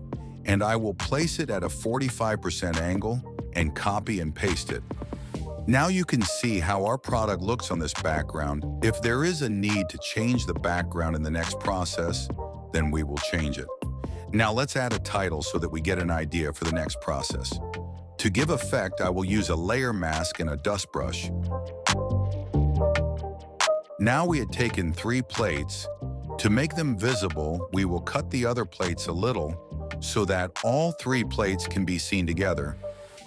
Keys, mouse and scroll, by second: 1.7-3.6 drag, 3.8 alt+shift+click, 4.5 click, 6.2 click, 7.5 click, 8.6 click, 10.3 click, 14.6-16.3 alt+shift+drag, 16.9 click, 17.9 click, 20.5 click, 21.9 click, 22.1 click, 22.5 click, 22.8 click, 23.8 click, 25.8 click, 26.2-29.1 drag, 30.3-31.9 drag, 32.9-33.2 drag.